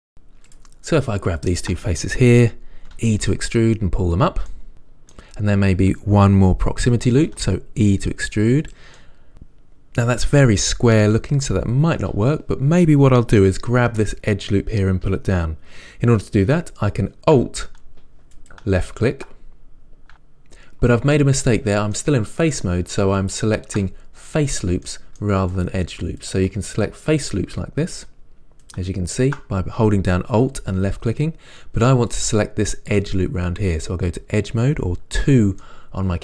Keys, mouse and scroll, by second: 0.0 click, 1.7 shift+click, 3.2 e, 4.7-7.6 middle drag, 7.6 e, 9.0 click, 9.4-18.7 middle drag, 11.9-15.6 scroll up 2, 15.6-18.7 scroll up 1, 18.7 alt+click, 22.2-23.5 middle drag, 23.5 alt+click, 25.1 middle click, 25.9 alt+click, 32.4-35.9 drag, 35.9 middle click.